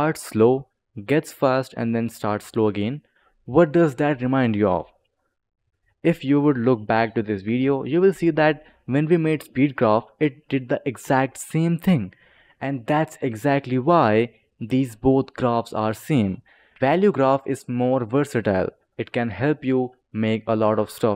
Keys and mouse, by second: 5.1 click, 5.5 click, 8.0 right click, 9.2 click, 10.2 click, 10.9 space, 12.2 click, 13.9 click, 16.0 click, 18.9 click.